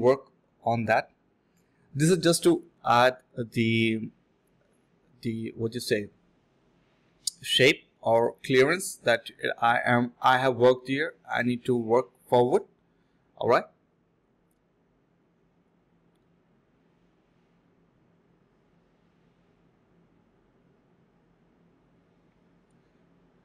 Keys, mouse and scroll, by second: 0.5 shift+click, 0.9 alt+click, 1.4 alt+click, 1.7 alt+click, 1.8 alt+double click, 2.6 alt+click, 2.9 alt+click, 3.6-4.4 typing, 3.8 ctrl+b, 5.8 double click, 14.1 typing, 15.3 alt+click, 15.6 alt+click, 16.6-17.3 typing, 17.4 alt+click, 17.7 alt+click, 18.9-19.7 typing, 19.3 ctrl+b, 19.9 double click, 20.3 shift+click, 20.4 shift+double click, 20.5 shift+click, 22.5 double click.